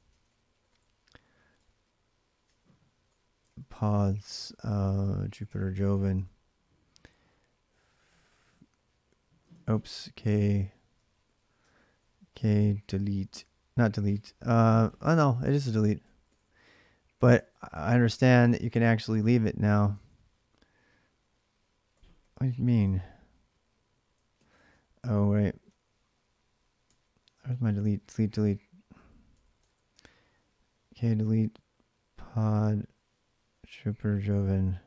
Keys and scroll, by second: 0.0-0.6 typing, 1.4 Return, 2.1-5.7 typing, 5.9 Return, 9.3 ctrl+[, 9.3 ctrl+c, 9.5-17.6 typing, 11.4 ctrl+[, 18.4 Return, 19.7 ctrl+[, 19.9 k, 21.1-22.5 typing, 22.6 Return, 24.2 ctrl+c, 24.4 ctrl+[, 24.5 k, 25.5 k, 27.0-33.6 typing.